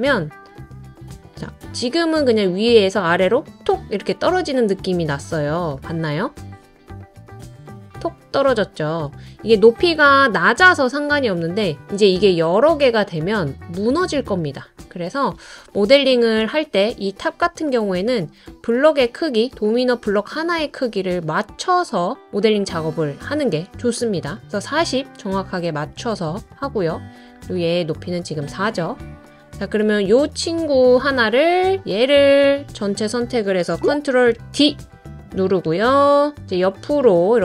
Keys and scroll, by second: 34.4 super+d.